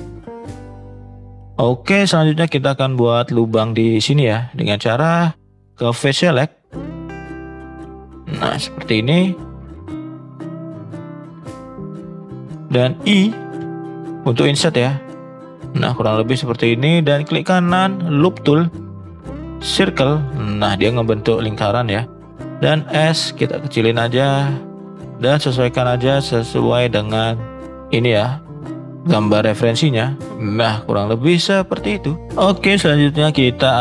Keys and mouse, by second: 5.3 click, 6.7 click, 7.6 shift+click, 7.9-9.0 shift+drag, 9.6 shift+click, 10.4 shift+click, 10.8 shift+click, 11.4 shift+click, 12.5 shift+middle click, 14.1 i, 17.2-19.9 right drag, 22.4 s, 25.3-27.6 drag, 27.6 s.